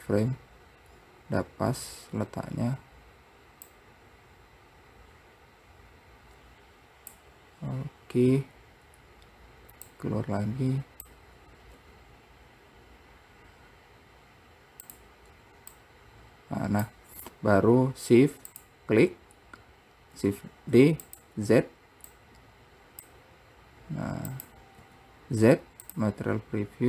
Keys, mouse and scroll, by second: 3.8 click, 10.0 click, 11.9 r, 15.9 click, 18.6 shift+click, 20.3 shift+d, 22.3-24.5 drag, 24.9 z.